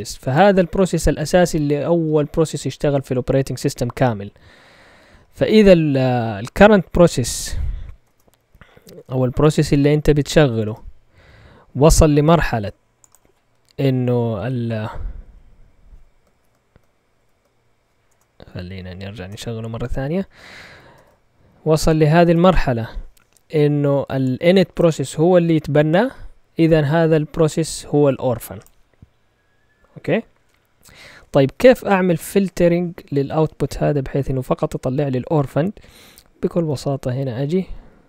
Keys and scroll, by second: 7.0-8.0 typing, 8.4 Up, 8.7 Up, 9.1 Up, 9.9 Up, 10.2 Down, 10.6 Return, 13.7 Up, 15.1 Down, 16.3 ctrl+l, 17.2 ctrl+Tab, 18.1 BackSpace, 18.6 Up, 19.3 Return, 20.9 ctrl+Tab, 21.5 Up, 22.2 Return, 34.2 Up, 35.8 Left, 36.4 Left, 36.4-36.8 typing.